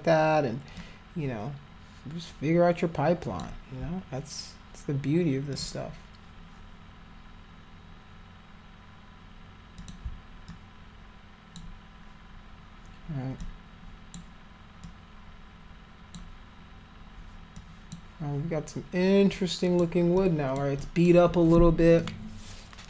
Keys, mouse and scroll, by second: 0.7-3.4 alt+drag, 5.5 click, 9.8 click, 10.5-11.6 alt+drag, 13.4 alt+click, 14.8-16.1 alt+drag, 17.5 alt+click, 19.3 alt+click, 20.1 alt+click, 20.8 alt+click.